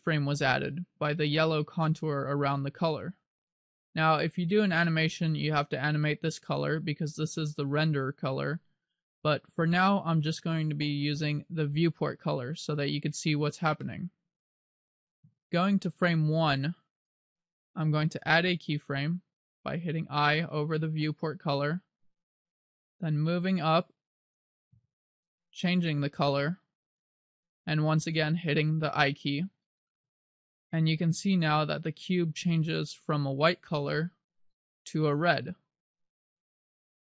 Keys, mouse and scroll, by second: 11.2 click, 13.9 middle click, 14.8-15.5 scroll down 1, 17.1 click, 20.4 i, 23.7 click, 25.6 click, 31.5 click.